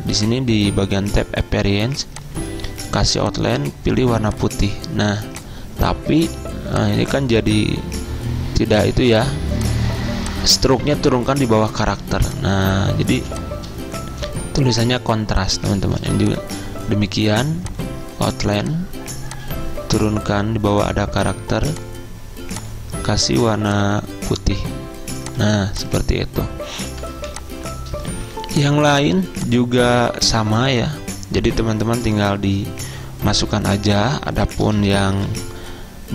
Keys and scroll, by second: 13.2 z, 15.3 v, 27.2 z, 35.2 v.